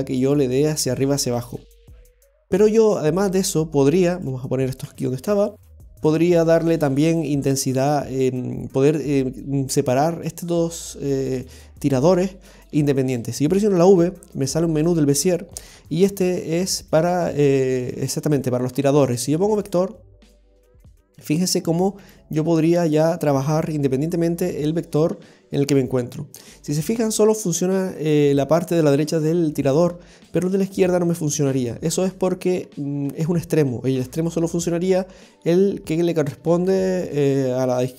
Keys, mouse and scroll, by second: 2.1 scroll down 1, 3.3 right click, 3.3 scroll down 2, 4.2 right click, 4.8 g, 6.4-7.2 scroll up 4, 7.8 right click, 21.0 right click, 22.0 g, 23.5 right click, 23.7 g, 29.6 right click, 30.2 right click, 30.6 g.